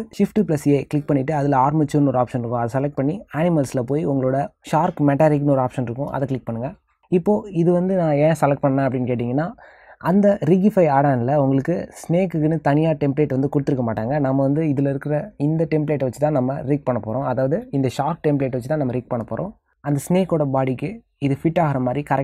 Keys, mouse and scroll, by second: 8.5 middle click, 17.0 middle click, 19.0 s.